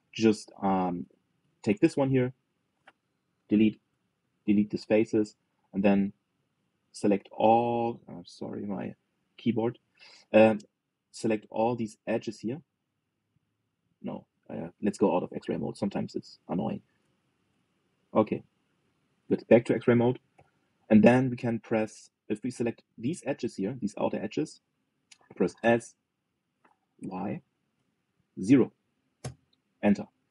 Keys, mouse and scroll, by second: 1.3 click, 4.1 Delete, 6.4 click, 8.5 click, 10.8-12.1 middle drag, 12.1 click, 12.6-13.2 scroll down 1, 13.2 click, 14.0 alt+shift+click, 14.8 click, 15.5 alt+z, 16.1 click, 17.8 alt+shift+click, 18.7 scroll down 1, 18.9-19.9 middle drag, 19.9 alt+z, 21.1 KP_3, 21.8-22.6 scroll up 3, 22.6-25.2 shift+middle drag, 26.3 s.